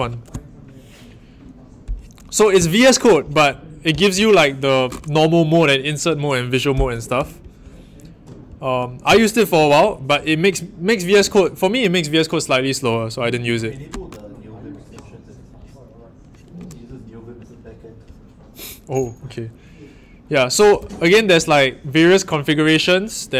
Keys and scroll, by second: 20.7 Up.